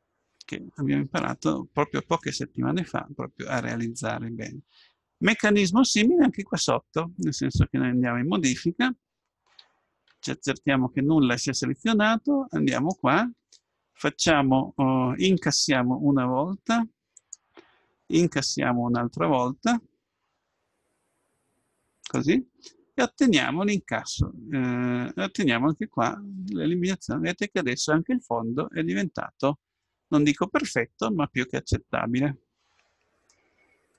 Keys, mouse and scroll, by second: 2.3-4.1 middle drag, 7.9 Tab, 9.6 a, 10.2 a, 10.6 a, 12.7-14.6 right drag, 15.4 i, 18.3 i, 22.6-24.6 middle drag, 26.0 Tab, 26.4-28.3 middle drag, 29.9-31.5 middle drag, 33.4-33.9 middle drag.